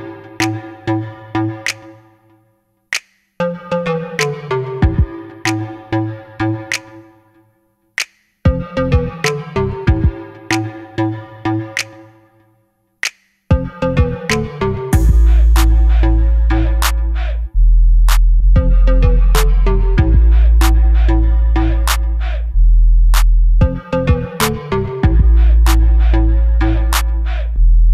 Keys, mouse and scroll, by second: 0.0 s, 1.8-2.2 scroll down 1, 3.9 s, 5.6 click, 6.0 Tab, 6.2 click, 6.6 3, 7.2 i, 8.7 click, 9.2 e, 10.5 3, 10.6 click, 11.3 e, 13.0 click, 13.4 e, 15.1 click, 15.3 s, 17.0 click, 17.5 g, 18.6 click, 20.6 i, 20.6 click, 20.9 e, 24.8 click, 25.2 e, 25.6 click, 25.8 s, 26.2 click, 26.4 e, 27.7 click.